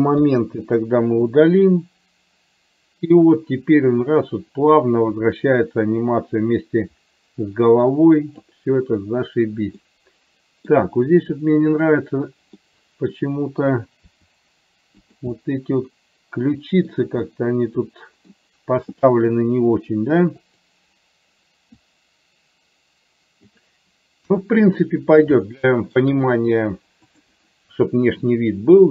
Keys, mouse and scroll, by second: 0.4 Delete, 1.5-8.6 drag, 9.9 middle click, 12.8 middle click, 14.3 r, 15.4-16.9 middle drag, 17.4-18.4 middle drag, 20.6 click, 22.0-23.6 drag, 24.4 KP_1, 25.8 shift+middle click.